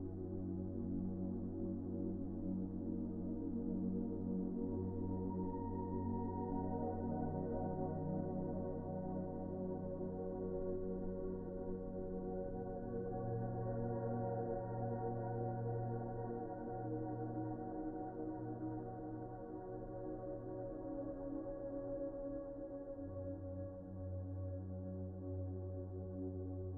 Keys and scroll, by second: 25.1 z.